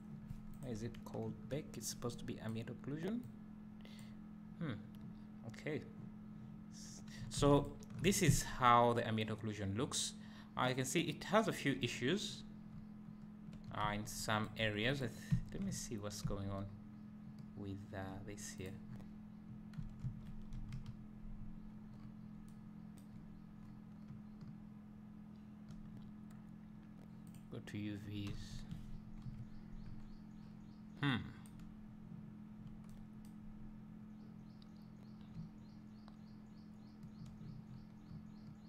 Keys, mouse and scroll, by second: 0.5 click, 1.4 Delete, 2.6 click, 3.2 click, 7.7 ctrl+shift+click, 8.3 `, 8.9 middle drag, 9.9 middle click, 10.3 middle drag, 10.7 middle drag, 12.3-12.7 scroll up 2, 12.7 `, 14.1 Tab, 14.5 click, 14.7 Tab, 15.1 click, 15.4 `, 15.9 scroll down 2, 16.3 `, 18.7 click, 18.9 scroll down 1, 19.8 Tab, 20.7 KP_Decimal, 22.0 scroll up 1, 23.6 scroll up 1, 23.8 middle click, 27.3 click, 28.5 a, 35.5 `.